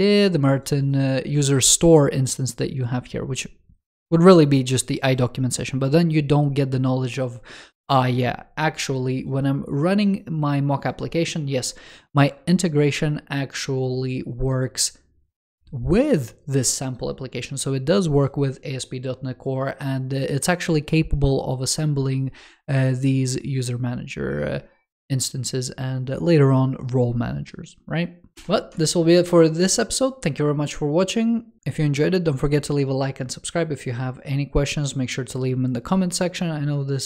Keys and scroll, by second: 28.3 shift+super+F5.